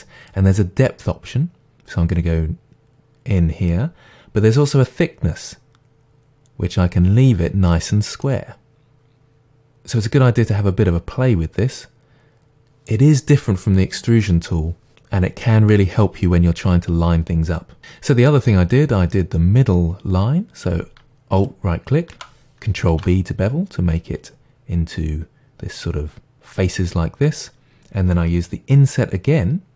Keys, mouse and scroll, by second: 0.3-8.2 drag, 8.2-9.7 middle drag, 9.7-17.8 drag, 17.8-21.4 middle drag, 21.4 alt+click, 22.9 ctrl+b.